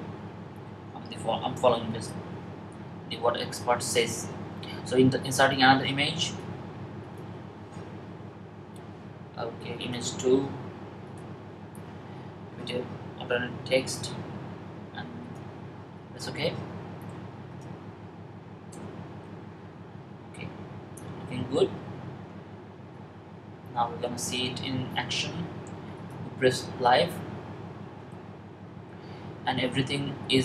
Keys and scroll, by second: 1.3 Up, 12.7-14.4 typing.